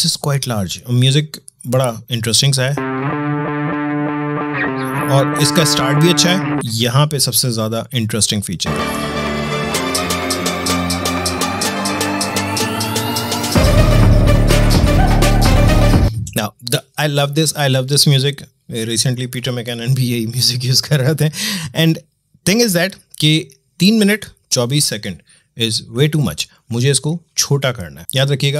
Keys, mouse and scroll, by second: 2.2 space, 6.6-8.6 drag, 8.6 space, 15.9 space.